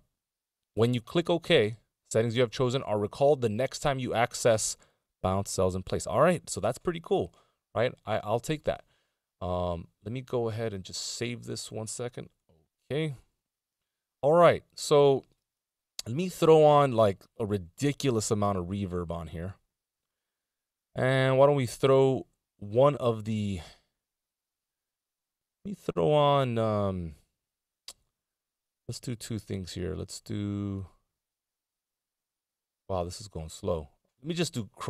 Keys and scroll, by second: 12.7 super+d.